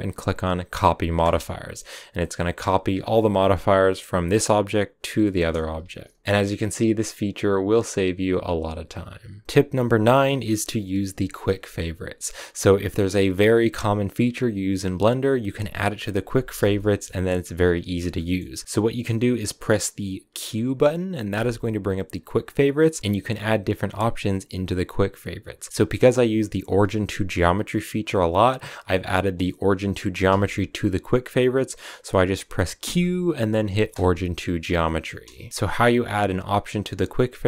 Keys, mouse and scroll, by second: 4.9 scroll down 2, 5.0 middle click, 5.8 a, 6.0 w, 6.1 scroll down 2, 6.2 click, 6.6-6.9 scroll up 3, 6.9-8.9 middle drag, 9.4 shift+middle click, 16.4 middle click, 17.8-34.4 shift+middle drag, 34.4 q, 34.6-37.4 middle drag.